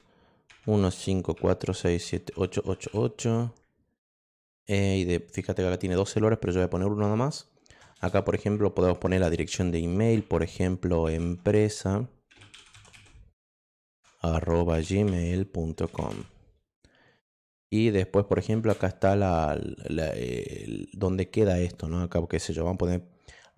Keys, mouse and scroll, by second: 0.2-2.3 typing, 11.0-13.4 typing, 13.8 ctrl+alt+q, 14.5-16.6 typing, 18.5 shift+Return.